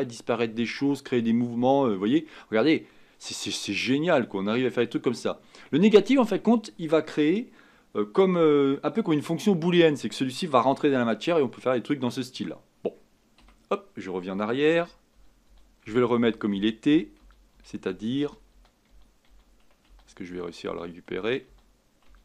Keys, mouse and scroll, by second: 14.7 ctrl+z, 15.2 ctrl+z, 15.5 ctrl+z, 15.8 ctrl+z, 16.2 ctrl+z, 16.5 ctrl+z, 16.9 ctrl+z, 17.2 ctrl+z, 17.5 ctrl+z, 17.9 ctrl+z, 18.2 ctrl+z, 18.6 ctrl+z, 18.9 ctrl+z, 19.3 ctrl+z, 19.9 ctrl+z, 20.3 ctrl+z, 20.7 ctrl+z, 21.1 ctrl+z, 21.4 ctrl+z, 22.1 ctrl+z.